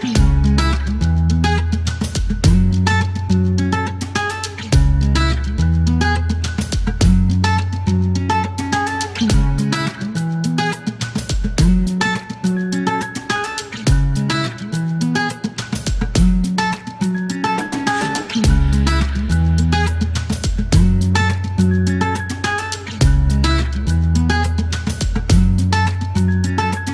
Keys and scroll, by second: 6.2 KP_0, 11.7 h, 20.9 alt+e, 22.9 KP_0.